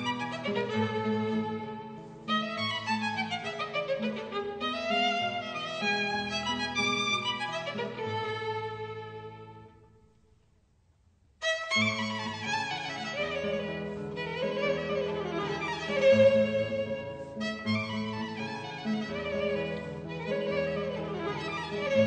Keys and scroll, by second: 8.7 e, 12.3 -, 13.1 b, 14.6 super+z, 15.3 b, 15.6 super+z, 19.9 super+z.